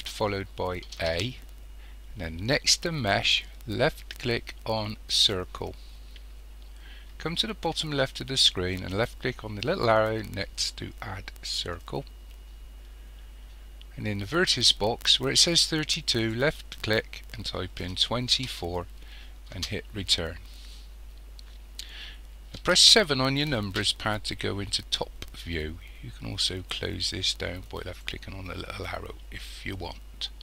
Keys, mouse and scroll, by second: 1.0 shift+a, 11.5 click, 16.2-28.4 drag, 19.7 Return, 22.6 KP_7.